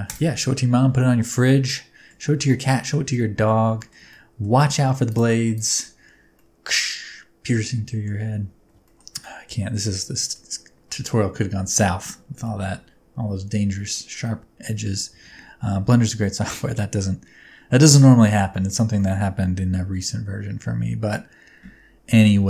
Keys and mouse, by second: 1.6-2.0 middle drag, 2.7 shift+middle drag, 3.0-3.4 middle drag, 3.7 shift+middle click, 4.0-4.3 middle drag, 5.9 Tab, 6.3-8.0 middle drag, 8.5 Tab, 8.8 shift+middle click, 9.2 middle click, 10.1 shift+middle click, 12.4-13.9 middle drag, 14.2-14.8 middle drag, 18.4 shift+middle drag, 18.9-21.0 middle drag.